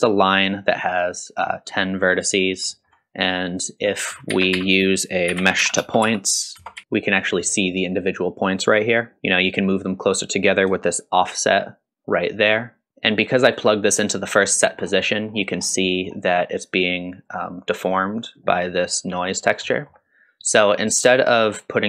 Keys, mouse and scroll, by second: 0.2 middle click, 2.2 middle click, 2.7 middle click, 3.3 click, 3.8 click, 4.3 shift+a, 9.2 shift+middle click, 9.2-9.7 scroll up 1, 10.9-14.7 shift+drag, 14.7 scroll down 1, 15.0 middle click, 15.5-15.9 scroll down 1, 15.9 middle click, 19.4 scroll up 2, 19.7 middle click, 21.0-21.8 drag.